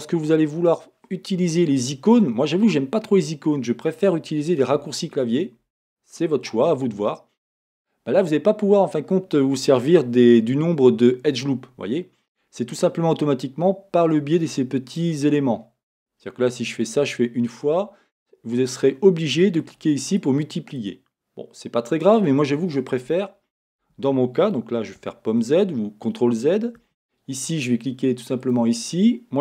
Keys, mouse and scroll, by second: 8.4-9.5 scroll, 9.5-14.2 scroll down 1, 15.3-16.9 middle drag, 16.9-17.9 drag, 19.6-28.6 drag, 23.8 Escape, 25.0 z, 26.8 Escape.